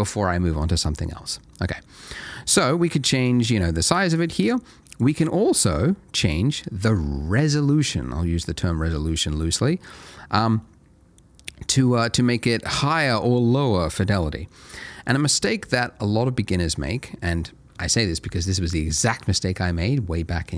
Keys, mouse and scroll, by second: 1.7 shift+middle click, 2.2-3.2 scroll up 1, 5.5-5.9 scroll, 5.9-6.3 scroll up 1, 6.3 middle click, 7.4 click.